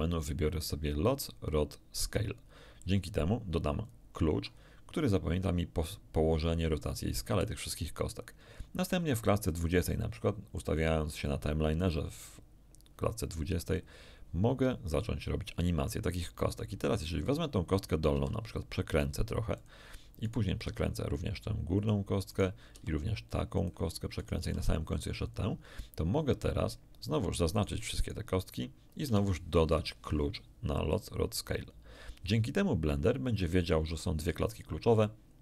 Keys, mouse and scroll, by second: 3.8 click, 9.5-10.9 drag, 16.5 right click, 18.1 r, 19.5 click, 20.2 right click, 20.6 r, 21.7 click, 22.3 right click, 22.7 r, 23.5 click, 24.1 middle click, 24.3 r, 25.2 click, 27.5 shift+middle click, 28.0 shift+middle click, 29.6 shift+i, 31.4 click, 33.6-34.0 scroll up 1, 34.1-34.7 scroll up 1, 35.0 middle click.